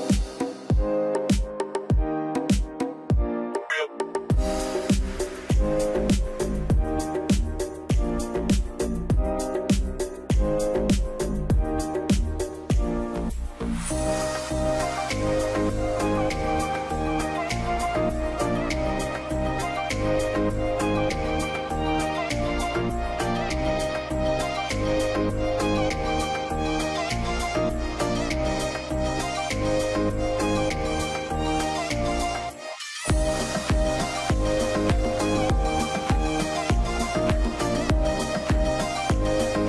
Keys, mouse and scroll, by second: 3.9 scroll up 1, 5.0 scroll down 1, 21.2-21.7 alt+scroll down 1, 21.7 middle click, 23.0 z.